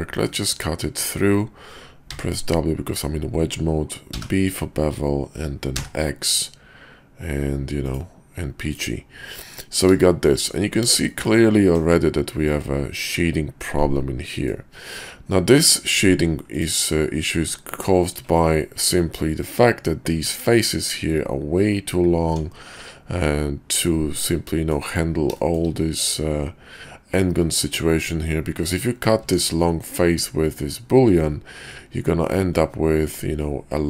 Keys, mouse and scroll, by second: 9.5 middle drag, 10.0 shift+middle drag, 11.0 shift+middle drag, 11.7 KP_5, 13.6-14.5 middle drag, 16.5 click, 17.3 Tab, 20.1 Tab, 20.5 click, 22.2 Tab, 23.8-25.2 middle drag, 25.4 shift+drag, 29.1 Tab.